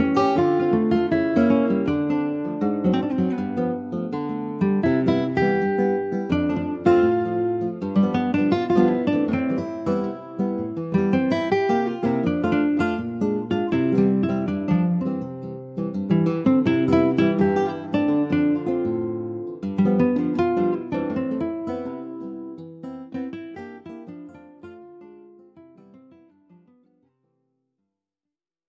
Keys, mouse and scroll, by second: 3.6 click, 5.2-15.6 middle drag, 15.9 click, 18.7 click.